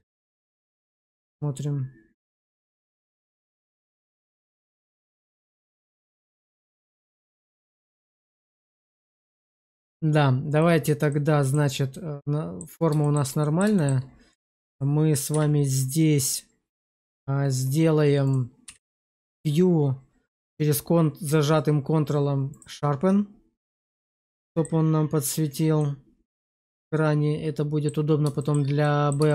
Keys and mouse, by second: 0.0 click, 0.4 click, 0.9 a, 2.2 click, 3.0 middle click, 5.3 shift+middle drag, 6.0 click, 6.7 q, 10.4-11.1 drag, 11.1 middle click, 11.8-12.5 middle drag, 12.9 shift+middle click, 13.3 middle click, 13.7 shift+middle click, 14.5 click, 15.2 q, 18.5 q, 23.5 middle click, 23.7 Tab, 24.3 middle click, 25.7-27.7 middle drag, 28.3 shift+middle click, 28.7 middle click, 29.2 shift+middle click.